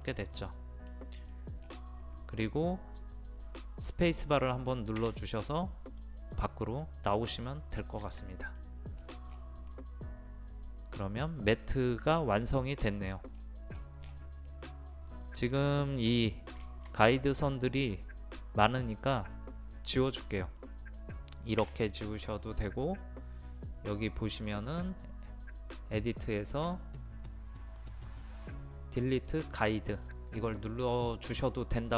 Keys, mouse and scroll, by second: 1.7 scroll down 1, 2.1-2.4 scroll up 1, 5.8 space, 5.9 click, 7.1 middle click, 8.0 Escape, 8.6 middle click, 9.0-9.3 scroll down 1, 9.7-13.3 middle drag, 13.3-13.7 scroll down 1, 14.1-14.5 scroll up 1, 14.5-15.8 middle drag, 18.8 click, 21.6 Delete, 24.9-31.3 drag.